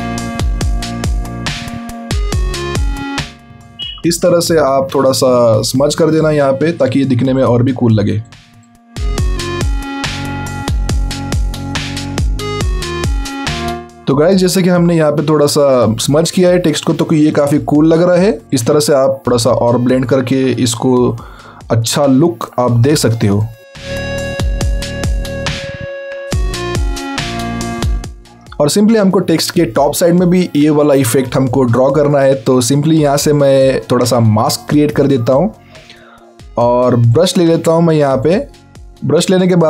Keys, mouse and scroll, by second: 1.2 alt+scroll down 3, 1.7 scroll up 1, 2.4 click, 5.3 alt+scroll down 2, 5.7 scroll up 1, 6.1 click, 7.1 click, 9.8 alt+scroll down 1, 10.0 alt+scroll up 2, 10.3 click, 13.6 right click, 13.9 click, 14.1 alt+right click, 14.5 click, 15.1 alt+scroll down 1, 15.2-15.5 alt+scroll up 2, 15.6 click, 16.5 alt+scroll down 1, 16.8-17.1 alt+scroll up 2, 17.2 click, 18.2 alt+scroll up 2, 18.5 click, 18.9 alt+scroll down 1, 19.1 alt+scroll up 2, 19.2 click, 21.2 scroll down 1, 21.3 scroll up 1, 21.3-21.6 scroll down 2, 21.7 alt+scroll up 1, 22.0 alt+scroll down 1, 22.3 alt+scroll up 1, 22.5 alt+scroll down 1, 22.7-23.6 alt+scroll up 2, 23.7-24.5 alt+scroll up 3, 24.6 click, 26.2 scroll down 1, 27.0 scroll up 1, 27.4 click, 28.0 scroll down 1, 28.1 scroll up 1, 28.2 click, 38.5 click, 38.9 z.